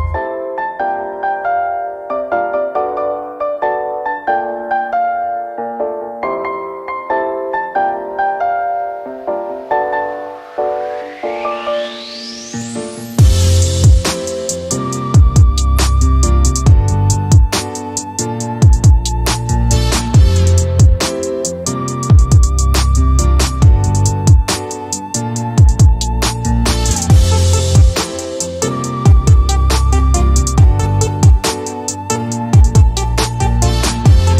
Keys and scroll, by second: 8.3-9.5 typing, 18.9-19.2 typing, 22.2-23.6 typing, 29.6 x, 31.6-32.3 typing.